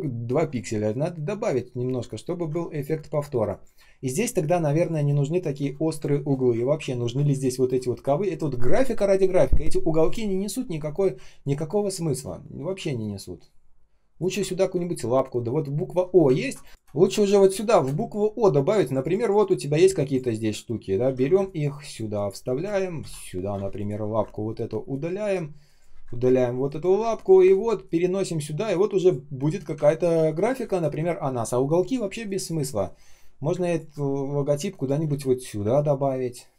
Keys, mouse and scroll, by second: 0.3 ctrl+scroll down 1, 0.4 ctrl+scroll up 1, 0.4 ctrl+scroll down 1, 2.6 space, 3.1 space, 3.1 space, 5.1 space, 5.1 space, 6.2 ctrl+scroll down 1, 7.2 space, 11.1 space, 11.6 space, 11.6 space, 13.2 space, 14.4 ctrl+scroll up 1, 16.7 space, 16.8 ctrl+scroll up 1, 17.1 ctrl+scroll down 1, 17.4 space, 17.9 ctrl+scroll up 1, 20.0 ctrl+click, 20.8 ctrl+scroll down 1, 20.9 ctrl+c, 21.3 space, 21.8 space, 21.8 space, 22.6 ctrl+scroll up 1, 22.9 ctrl+м, 23.4 Return, 24.0 Delete, 25.8 Delete, 26.8 Delete, 29.7 ctrl+scroll down 1, 30.5 space, 31.9 space, 32.4 space, 32.5 space, 34.5 space, 35.5 space, 36.0 space.